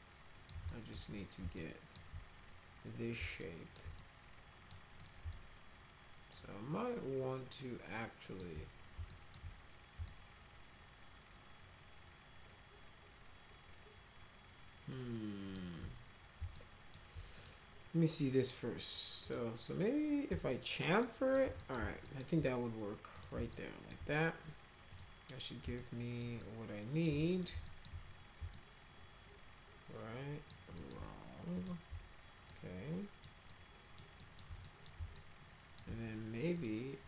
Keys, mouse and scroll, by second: 0.7 alt+middle click, 1.5 alt+middle click, 3.4 alt+middle click, 4.0 middle click, 5.0 middle click, 5.3-8.4 alt+middle drag, 9.1 alt+middle click, 10.1-15.5 alt+middle drag, 16.5 alt+middle click, 17.3 right click, 19.2 click, 20.3-21.4 alt+middle drag, 21.6 middle click, 22.0 alt+middle click, 23.1 click, 23.5 alt+middle click, 24.9 click, 25.8 alt+middle click, 26.4 alt+middle click, 27.2 middle click, 27.6 alt+middle click, 28.5-30.5 alt+middle drag, 30.8 alt+middle click, 31.5 click, 32.5 alt+middle click, 33.5 alt+middle click, 34.2 alt+middle click, 34.6 middle click, 35.1 alt+middle click, 36.6 click.